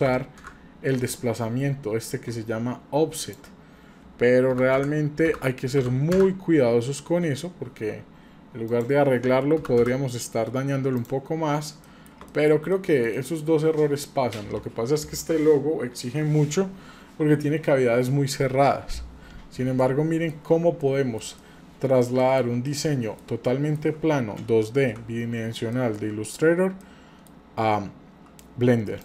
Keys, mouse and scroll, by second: 3.2-7.6 drag, 8.7-10.2 drag, 11.0 click, 11.1-11.8 scroll down 5, 11.8 middle drag, 12.3-12.7 shift+middle drag, 12.7 middle drag, 13.1 shift+middle click, 17.1-17.8 scroll up 2, 19.8 middle click, 20.8-21.3 shift+middle drag, 21.4 middle click, 22.7 middle click, 24.8 n, 25.7 shift+middle click, 26.8 middle click.